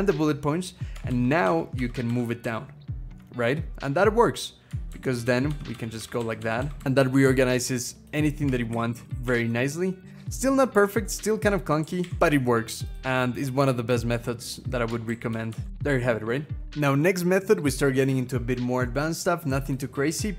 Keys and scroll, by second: 0.9 alt+Down, 1.2 alt+Down, 1.6 alt+Down, 1.9 alt+Down, 2.2 alt+Down, 3.4-4.5 scroll down 1, 4.7 alt+Down, 5.0 alt+Down, 5.3 alt+Down, 5.5 alt+Down, 5.8 alt+Down, 6.0 alt+Down, 6.2 alt+Down, 6.4 alt+Down, 6.6 alt+Down, 6.7 alt+Down, 8.5 alt+Up, 8.7 alt+Up, 8.9 alt+Up, 9.0 alt+Up, 9.2 alt+Up, 9.8 alt+Down, 10.4-11.5 scroll up 1, 11.6 alt+Up, 11.8 alt+Up, 12.0 alt+Up, 12.1 alt+Up, 14.9 alt+Down, 15.1 alt+Down, 15.3 alt+Down, 15.5 alt+Down, 15.7-16.6 scroll down 2, 16.6 scroll up 6.